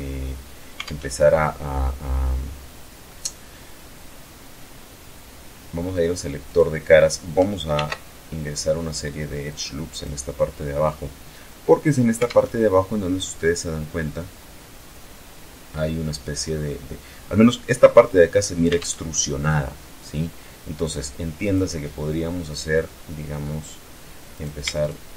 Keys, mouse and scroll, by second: 0.1 alt+Tab, 1.0-2.5 middle drag, 5.8 click, 7.0 ctrl+r, 7.5-8.1 ctrl+scroll up 2, 8.7 click, 9.2 click, 11.6 alt+Tab, 18.0 alt+Tab, 20.7 click, 23.5 right click, 24.1 shift+right click.